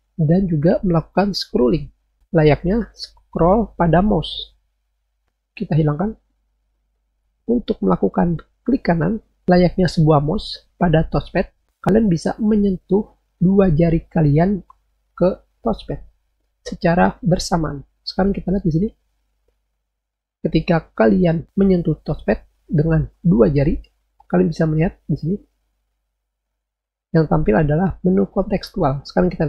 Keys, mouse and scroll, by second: 1.6 click, 6.9 click.